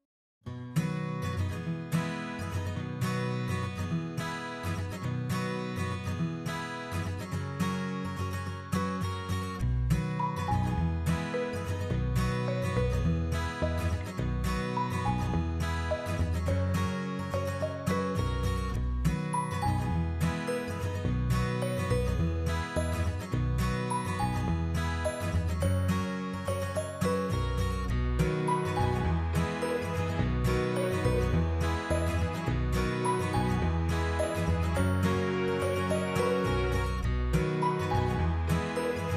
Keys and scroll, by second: 7.7 ctrl+v, 12.0 8, 12.8 Return, 16.6-17.7 typing, 21.0 Delete, 33.0 Up.